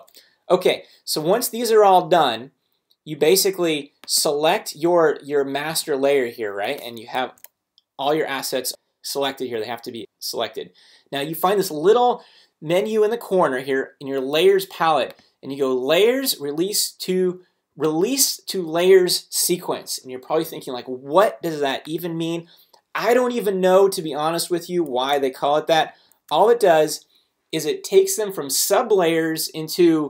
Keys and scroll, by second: 7.2 super+a.